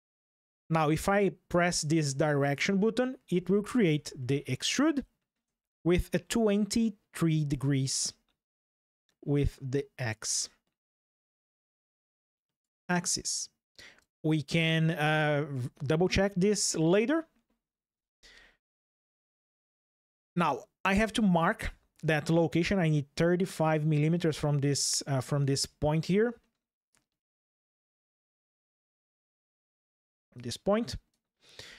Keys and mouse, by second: 2.2 click, 3.9-5.1 shift+middle drag, 7.9 ctrl+shift+3, 26.6-27.6 drag, 29.6 ctrl+shift+3.